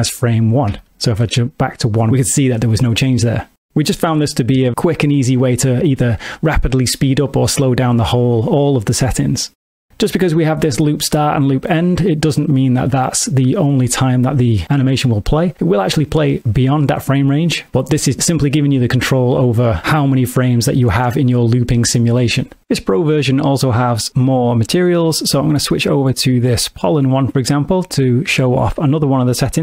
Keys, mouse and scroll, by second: 0.8 shift+Left, 9.9 space, 24.1 click.